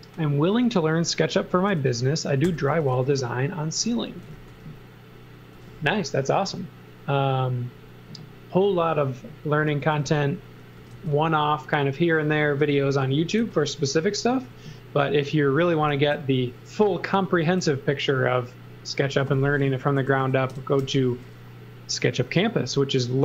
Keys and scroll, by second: 2.2-5.5 typing, 9.5-10.9 typing, 12.4 z, 12.9 x, 13.4 z, 14.3 x, 15.6 m, 17.6 s, 19.7-20.8 typing.